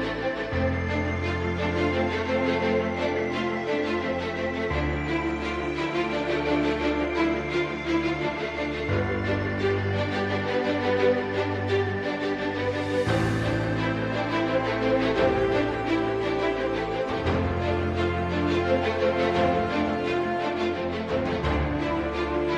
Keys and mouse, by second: 1.0 middle click, 1.8 middle click, 3.5 3, 4.6 ctrl+alt+click, 6.1 KP_3, 7.3 shift+click, 7.4 shift+middle click, 11.8 ctrl+r, 14.5 s, 17.7 middle click, 19.8 KP_1, 21.4 s.